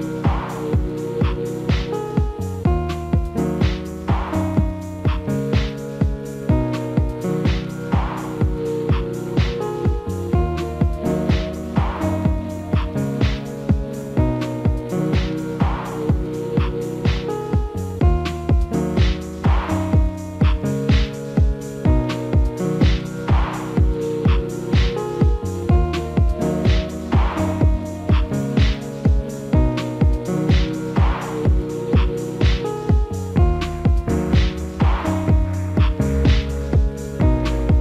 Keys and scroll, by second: 10.8 alt+w, 19.4 F4.